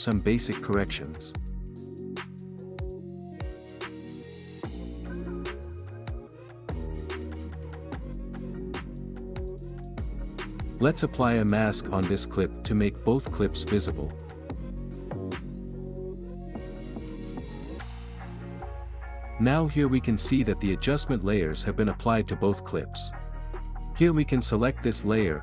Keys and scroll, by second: 21.3 space.